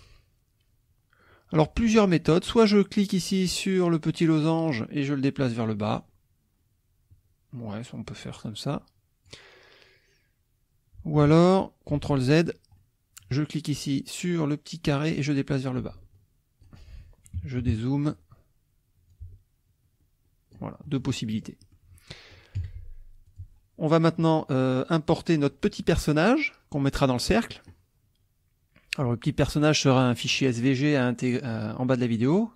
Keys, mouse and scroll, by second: 1.2 click, 4.7 click, 6.4-9.5 drag, 11.9 ctrl+z, 12.8 ctrl+click, 14.9-16.8 drag, 17.4 -, 19.1-20.7 ctrl+drag, 20.9 ctrl+middle click, 21.2 ctrl+click, 21.6 ctrl+click, 22.0 ctrl+click, 22.6 F1, 23.3 click.